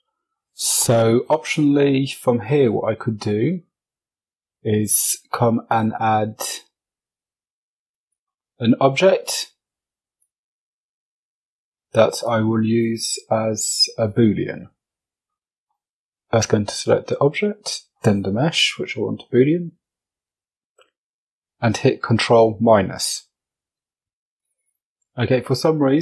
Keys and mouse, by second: 0.0 drag, 1.5 F22, 3.6 shift+a, 9.3 s, 10.2 q, 10.4 w, 15.1 F22, 16.1 shift+click, 19.8 ctrl+KP_Subtract, 23.6 click.